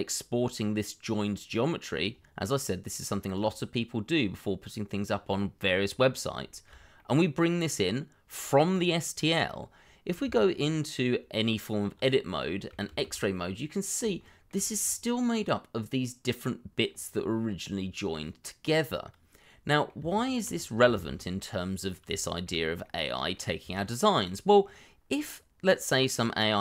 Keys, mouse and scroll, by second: 5.3 shift+middle click, 5.9-6.4 scroll up 1, 6.5 shift+middle click, 6.9 middle click, 9.4-10.2 scroll up 1, 10.2 Tab, 12.3 middle click, 12.9 shift+z, 13.3 middle click, 14.2 shift+middle click, 14.5-14.8 shift+scroll up 2, 14.8 middle click, 20.0 Tab, 20.6 scroll down 1, 20.9 shift+z, 21.2 middle click, 22.2 shift+middle click, 22.8 middle click, 23.9 shift+middle click, 24.5-26.5 scroll down 1, 26.5 middle click.